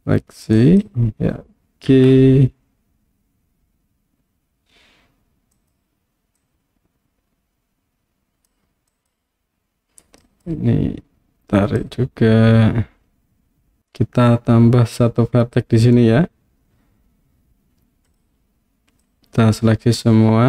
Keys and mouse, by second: 0.6 click, 1.9 g, 5.6 click, 6.5-8.5 drag, 8.9 click, 10.3 click, 11.9-13.8 drag, 18.1 click, 19.1 click.